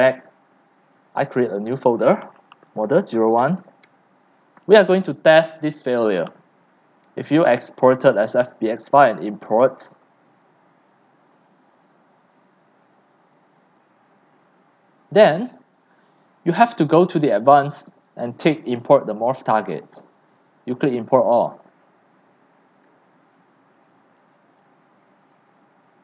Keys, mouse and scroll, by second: 2.4-3.7 typing, 5.1-26.0 drag.